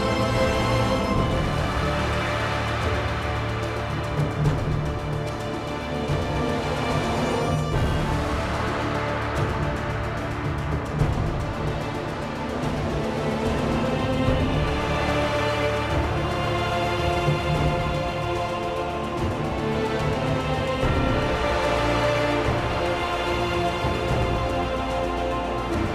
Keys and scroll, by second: 0.1 ctrl+z, 2.0 1, 3.8 1, 9.1 1, 10.6 1, 12.4 1, 17.4 Delete, 19.4 Delete, 20.8-24.0 typing.